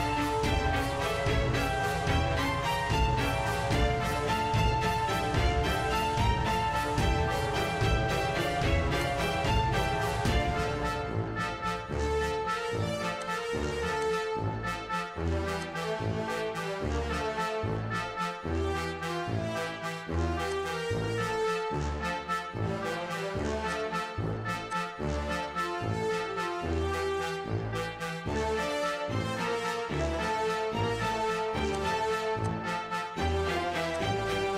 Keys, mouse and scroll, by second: 0.0-4.3 typing, 4.1 scroll, 6.3 Tab, 9.0 click, 9.8 typing, 11.2 Return, 13.2 click, 14.0 click, 17.8 click, 20.6 click, 21.5 s, 23.7 click, 24.7 click, 31.8 click, 32.4 click, 34.0 click.